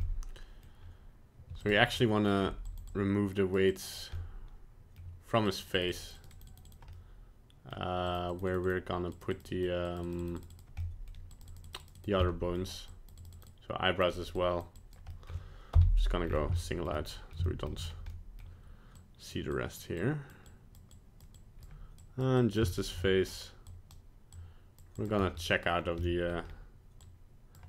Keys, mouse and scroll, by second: 0.0 middle click, 0.6 middle click, 1.5 f, 1.9-2.4 scroll up 1, 2.4 f, 2.9 click, 3.7 click, 3.8 click, 4.3 middle click, 4.4 middle click, 5.5 click, 5.8 click, 6.0 click, 6.0 click, 6.2 click, 6.3 click, 6.5 click, 6.7 click, 6.9 middle click, 8.1 click, 8.3 click, 8.5 click, 8.6 click, 9.1 click, 9.3 click, 9.5 click, 9.9 click, 10.0 click, 10.2 click, 10.4 click, 10.5 click, 10.8 middle click, 11.3 click, 11.5 click, 11.6 click, 11.8 click, 11.9 click, 12.2 middle click, 12.9 click, 13.2 click, 13.3 click, 13.5 click, 14.1 click, 14.4 click, 14.7 click, 15.1 middle click, 15.7 KP_Divide, 16.2-16.5 scroll up 4, 16.5 shift+middle click, 16.9 middle click, 17.5 shift+middle click, 17.9 scroll up 1, 18.1 middle click, 19.0 click, 19.5 click, 20.0 click, 20.5 click, 20.9 click, 21.3 click, 22.0 click, 22.4 click, 22.7 shift+middle click, 23.0 middle click, 23.7 click, 24.3 click, 24.9 click, 25.4 middle click, 25.7 scroll down 1, 26.0 middle click, 26.2 middle click, 26.4 scroll up 1, 27.0 click.